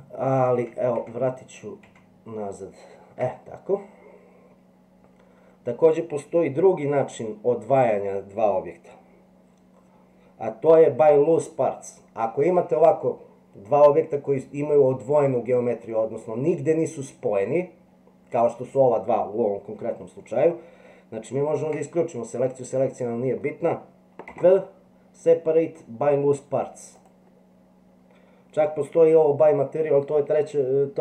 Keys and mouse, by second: 0.6 ctrl+z, 1.0 ctrl+z, 21.6 alt+a, 22.5 middle click, 24.2 p.